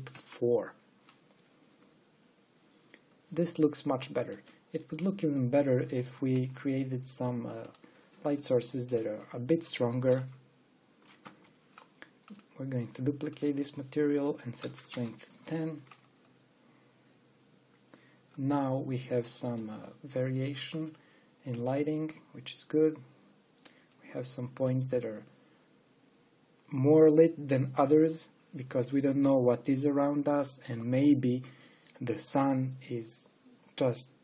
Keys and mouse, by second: 5.8-6.9 drag, 7.2 shift+d, 9.8-12.1 drag, 13.4-16.0 drag, 16.2 click, 19.6-21.2 middle drag, 21.6 g, 24.4-25.7 drag, 25.8 click.